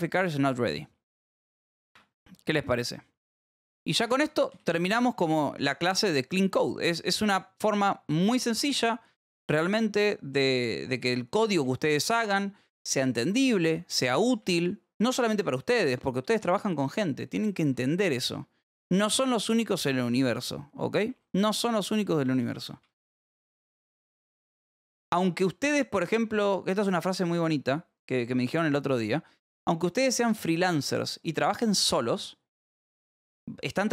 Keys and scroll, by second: 0.7 k, 0.9 v, 1.9 Escape, 2.1 j, 3.1-4.4 typing, 9.1 h, 10.0 t, 11.6 y, 12.9 k, 13.5 k, 13.6 Escape, 13.8 k, 14.9 k, 15.7 j, 17.3 a, 17.7 Return, 19.4 alt+v, 19.8 Escape, 20.3-22.8 typing, 24.1-26.8 typing, 28.2 Return, 29.3 space, 29.6 Up, 29.9 BackSpace, 30.6 Right, 31.3 Down, 32.4 a, 33.0 BackSpace, 33.8 Return.